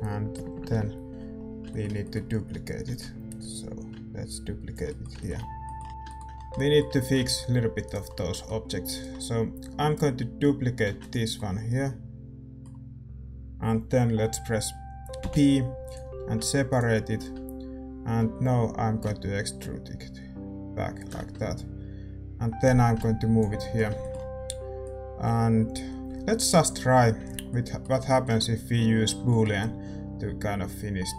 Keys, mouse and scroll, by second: 0.3 ctrl+KP_Add, 0.5 ctrl+KP_Add, 1.6-3.5 middle drag, 2.8 shift+d, 3.5-5.9 drag, 7.8-10.8 right drag, 10.8 shift+d, 15.9 p, 16.3 Tab, 16.6-18.9 right drag, 18.1 a, 18.9 e, 21.1 Tab, 22.6-24.8 drag, 23.5-31.1 middle drag.